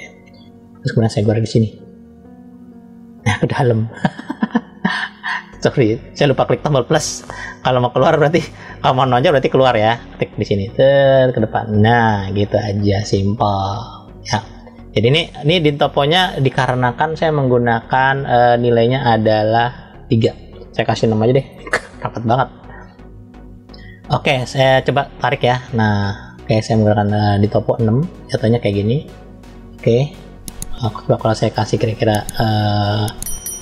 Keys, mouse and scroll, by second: 0.4-1.1 scroll down 1, 1.7 click, 4.3 click, 6.6 click, 10.4 click, 16.8 click, 19.0-21.9 drag, 22.6 click, 24.8 click, 29.9 click, 31.5-33.6 drag.